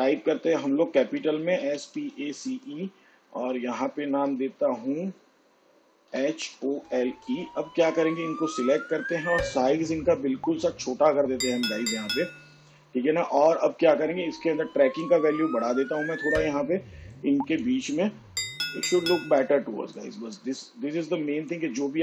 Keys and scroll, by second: 0.1 a, 0.6 BackSpace, 1.9-4.3 typing, 6.7-8.4 typing.